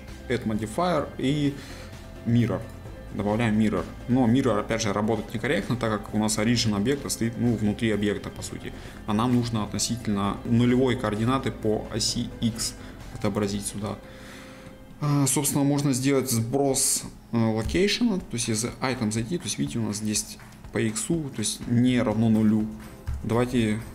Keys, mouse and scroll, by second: 3.5-4.1 scroll up 1, 4.1-7.1 middle drag, 8.4-8.9 scroll down 1, 8.9-12.5 middle drag, 14.1 middle click, 14.9 scroll up 1, 15.3-16.0 scroll down 1, 16.0-17.7 middle drag, 17.7 n.